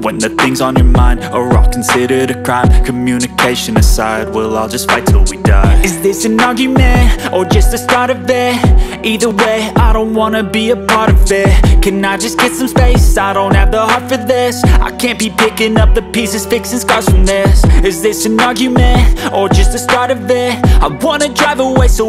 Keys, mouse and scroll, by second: 0.1 right click, 9.8 click, 12.5 click, 17.1 right click.